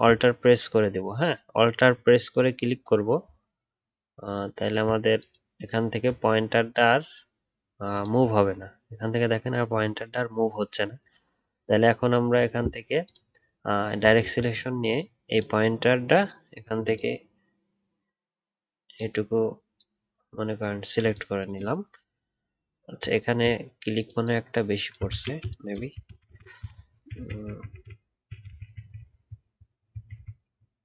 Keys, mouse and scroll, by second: 7.9 alt+click, 14.1-16.9 alt+scroll up 1, 23.2 alt+scroll up 2, 26.1 ctrl+z, 26.3 ctrl+z, 26.4 ctrl+z, 26.5 ctrl+z, 27.1 ctrl+z, 27.4 ctrl+z, 27.8 ctrl+z, 28.3 ctrl+z, 28.4 ctrl+z, 28.6 ctrl+z, 28.8 ctrl+z, 28.9 ctrl+z, 29.4 ctrl+z, 29.6 ctrl+z, 30.0 ctrl+z, 30.1 ctrl+z, 30.4 ctrl+z, 30.7 ctrl+z.